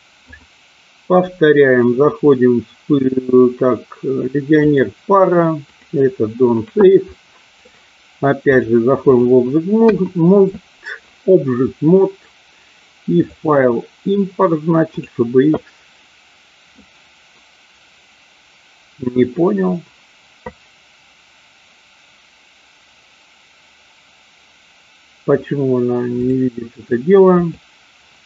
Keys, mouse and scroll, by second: 0.3-6.0 drag, 7.1 middle click, 8.5 click, 9.8 KP_1, 13.1-15.1 drag.